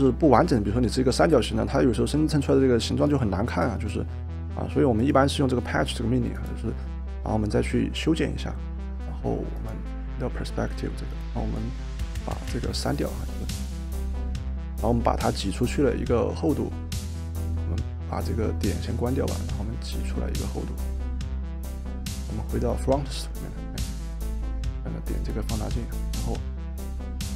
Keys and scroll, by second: 8.7 Escape, 12.6 Delete.